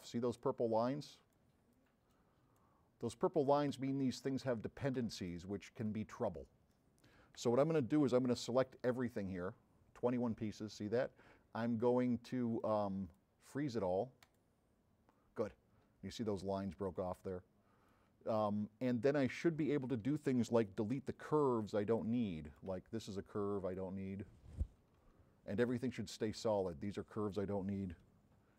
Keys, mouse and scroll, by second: 0.4 click, 1.0-1.6 drag, 2.1-2.8 drag, 3.1-3.8 drag, 4.2-5.0 drag, 4.2 m, 5.3-7.4 drag, 7.8 middle drag, 12.6 click, 14.3 click, 18.0 click, 18.8-19.6 scroll up 3, 21.5 s, 22.2 right click, 26.4 click.